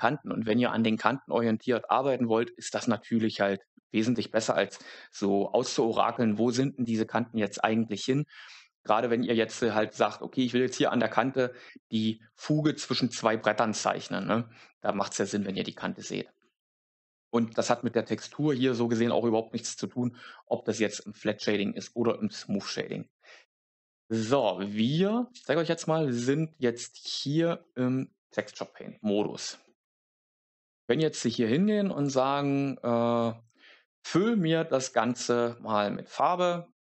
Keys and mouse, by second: 22.7 Tab, 24.3 a, 25.3 Tab, 31.9 click.